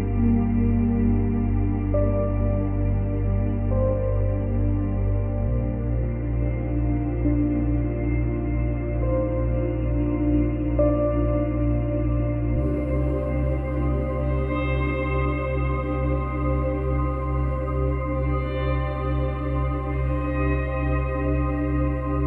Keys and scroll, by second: 18.6 space, 21.2 space.